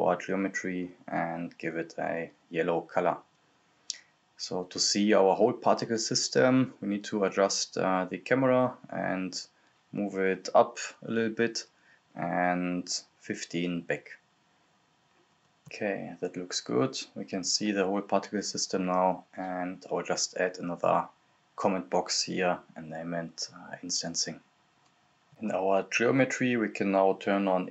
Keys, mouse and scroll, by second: 1.6 click, 2.7 Return, 3.0 click, 3.5 Return, 4.1 scroll down 1, 4.2 click, 5.6 click, 6.3-9.6 drag, 9.6 scroll up 1, 11.3-11.6 scroll down 1, 16.5 click, 16.8-17.6 scroll up 1, 17.6 click, 19.1 scroll down 1, 19.5 click, 20.6-22.4 typing, 22.3 click, 22.7 scroll up 1, 22.9 right click, 23.2 click, 23.3 scroll down 1, 23.5-24.6 drag, 25.8-26.4 scroll up 1, 27.0 scroll up 1, 27.0 click.